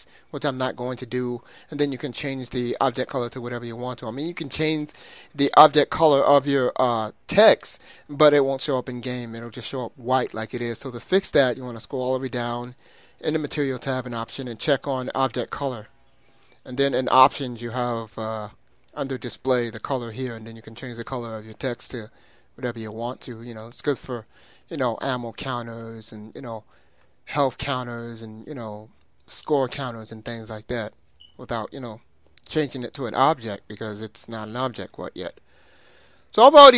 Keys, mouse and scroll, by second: 3.5-5.4 middle drag, 5.4-6.1 scroll up 1, 10.0-14.0 scroll down 1, 14.0 scroll down 1, 16.9-18.7 drag, 17.6-18.5 scroll down 1, 18.5 scroll down 1, 18.7-19.8 middle drag, 19.8-22.5 drag, 30.0-31.9 middle drag, 32.6-33.6 scroll down 1, 33.6-35.5 middle drag, 35.6-36.7 middle drag, 36.7 click.